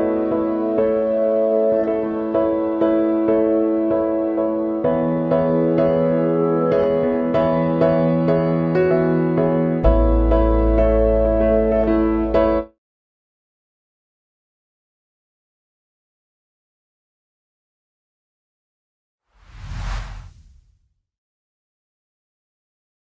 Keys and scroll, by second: 9.5 ctrl+d, 11.0 ctrl+;.